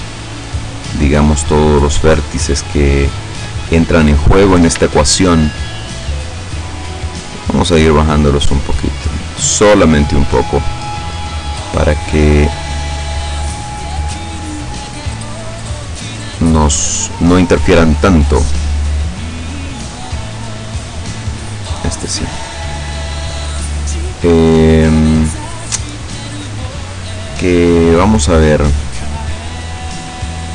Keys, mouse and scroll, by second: 0.7 shift+right click, 1.7 shift+right click, 2.9 shift+right click, 3.7 shift+middle click, 4.9 shift+middle click, 6.7-10.7 drag, 10.7 middle click, 11.9 middle click, 12.9-13.6 scroll up 1, 13.9 scroll down 2, 14.1 middle click, 14.9-16.9 middle drag, 19.9 right click, 20.9-22.1 drag, 22.1 middle click, 22.9 right click, 23.3 right click, 23.9-27.4 middle drag.